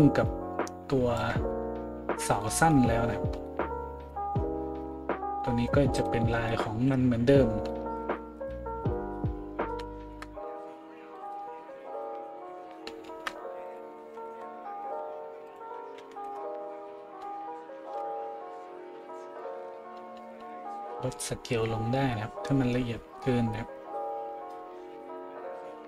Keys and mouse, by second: 6.0 middle click, 6.0 right click, 6.7 a, 11.1 middle click, 11.1 right click.